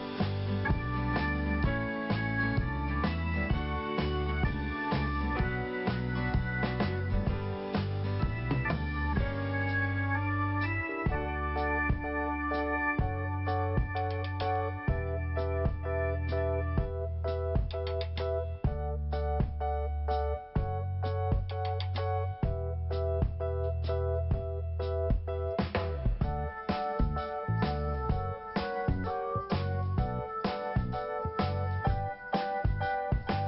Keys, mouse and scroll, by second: 0.5 click, 0.6 click, 1.8 click, 4.8 scroll down 2, 5.8 click, 5.9 click, 7.8 scroll down 1, 8.6 scroll up 1, 9.7 click, 11.2 click, 14.3 scroll up 1, 15.8 click, 15.8 click, 16.7 click, 16.8 click, 17.1 click, 17.2 click, 18.0 click, 21.8 click, 21.9 click, 22.7 click, 22.7 click, 23.1-23.6 scroll down 2, 24.3 click, 26.8 scroll down 1, 27.4 scroll up 1, 28.3 click, 30.4 scroll up 2, 31.5 click, 33.2 click, 33.3 click.